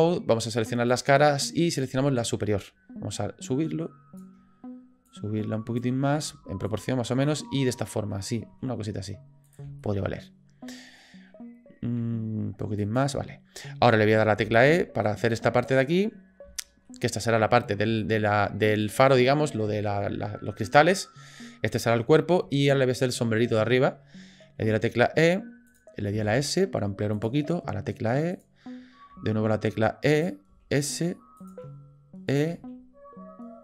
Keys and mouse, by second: 0.9 click, 1.7 click, 3.4 click, 5.1 click, 6.3 s, 7.3 click, 8.5 s, 9.9 shift+click, 12.0 s, 14.4 e, 16.7 shift+middle click, 18.0 shift+middle click, 18.9 click, 22.8 shift+middle click, 24.6 e, 26.1 s, 27.4 e, 29.1 e, 30.5 s, 31.6 e, 32.6 s.